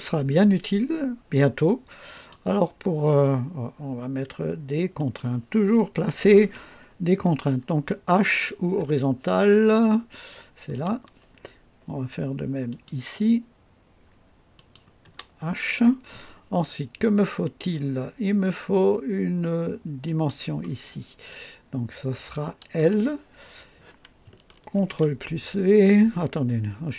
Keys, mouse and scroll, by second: 2.1 click, 4.9 click, 10.7 h, 12.7 click, 13.0 typing, 14.5 click, 15.0 typing, 20.0 click, 22.8 typing, 24.7 ctrl+v.